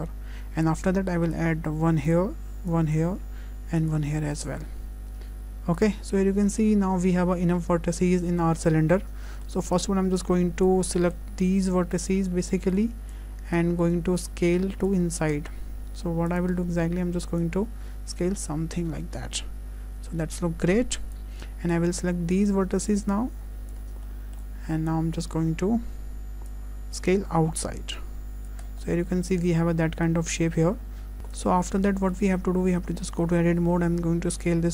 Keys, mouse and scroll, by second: 2.7 click, 3.8 click, 6.1 scroll up 1, 6.5 shift+middle click, 9.7 click, 21.7 click, 28.7-29.1 scroll down 3, 28.8 middle click, 30.2 Tab, 30.4-31.2 scroll down 2, 30.7 middle click, 31.2 Tab, 31.2 middle click.